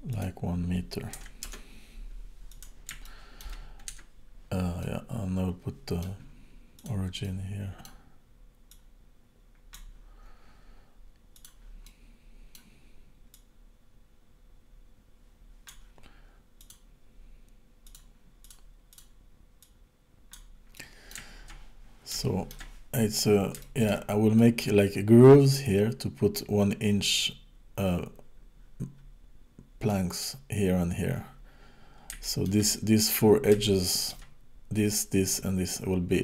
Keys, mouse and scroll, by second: 0.2 click, 2.5 click, 3.1 shift+middle click, 4.0 Tab, 4.8 middle click, 6.8 click, 7.2 middle click, 8.7 click, 11.4 click, 11.9 middle click, 13.3 click, 16.6 click, 18.5 click, 18.9 click, 19.7 click, 20.8 middle click, 21.4-22.1 shift+scroll down 5, 22.2 shift+middle click, 22.9 scroll down 1, 23.1-23.6 scroll up 1, 23.6 shift+middle click, 24.4 middle click, 29.9 middle click, 32.3 shift+middle click, 32.8-33.5 scroll down 2, 33.7 shift+middle click.